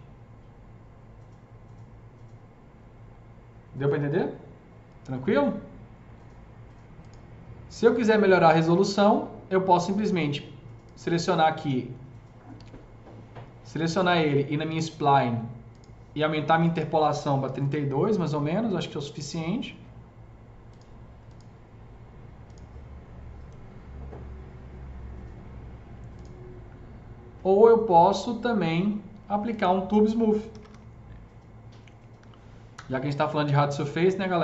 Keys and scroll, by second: 12.4 ctrl+z, 17.4 KP_3, 17.4 KP_2, 17.5 Return, 30.6 typing, 32.0 Down, 32.2 Down, 32.6 Return.